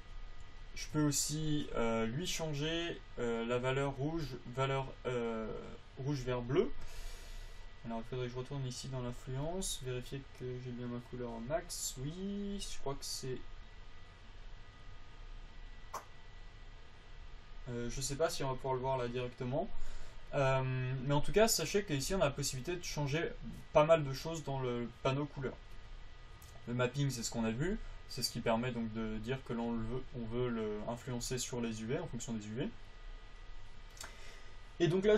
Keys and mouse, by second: 1.0-3.6 drag.